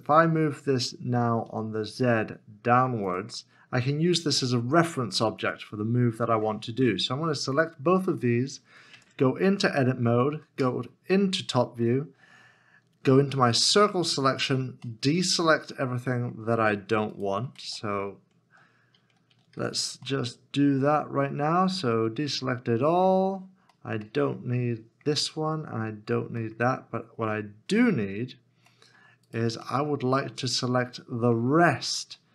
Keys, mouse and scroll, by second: 1.4 z, 7.6 shift+click, 8.9 Tab, 14.9 c, 15.3 middle click, 17.1 right click, 17.6 alt+z, 20.1 middle click, 28.7 middle click, 29.6 right click, 30.1 middle click, 32.2 shift+middle click.